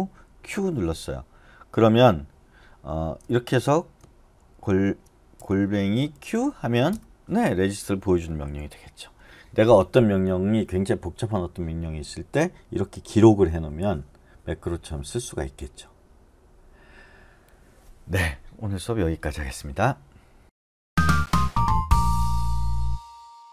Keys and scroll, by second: 0.4 q, 3.4-6.1 typing, 8.5 q.